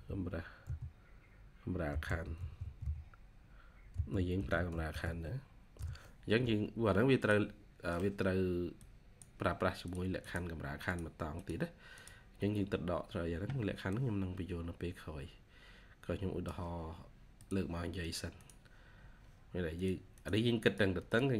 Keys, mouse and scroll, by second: 1.6-3.8 typing, 5.6 Return, 10.1 double click, 18.3 double click, 20.0 double click.